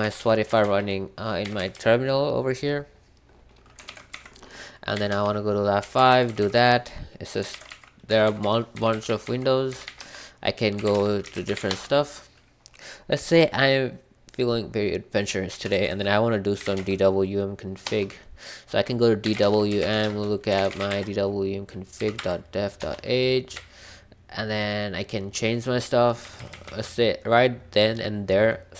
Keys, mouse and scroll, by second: 0.0-1.5 typing, 3.8 ctrl+b, 4.1-12.1 typing, 7.5 ctrl+b, 15.7 ctrl+f, 16.3-17.2 typing, 17.8 Return, 19.0-26.6 typing.